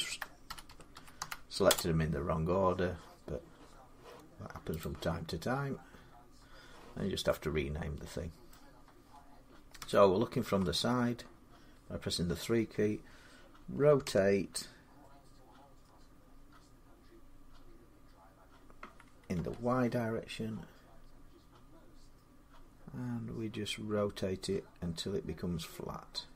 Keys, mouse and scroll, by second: 0.0-2.7 typing, 4.6 click, 5.4-5.7 scroll up 4, 5.7-6.4 typing, 5.7 scroll down 5, 8.3 middle click, 9.6 middle click, 9.6-10.4 typing, 13.8 r, 19.2 y.